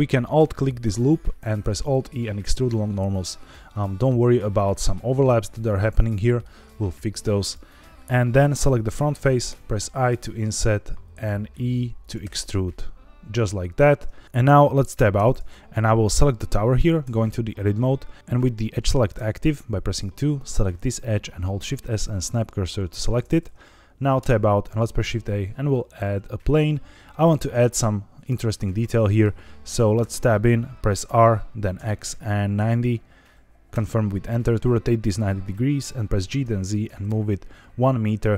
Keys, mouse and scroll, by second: 0.2 alt+click, 1.5 alt+e, 3.6 click, 4.4 middle click, 5.2-6.3 middle drag, 7.3 click, 7.7 middle click, 9.4 i, 11.9 click, 12.1 e, 13.1 middle click, 13.1 click, 15.1 Tab, 15.9 click, 17.0 Tab, 19.1 2, 20.3 click, 21.4 shift+s, 24.1 Tab, 24.7 shift+a, 29.9 Tab, 31.7 r, 31.7 x, 32.5 KP_9, 32.6 KP_0, 33.7 KP_Enter, 36.1 g, 36.3 z, 37.0 KP_1.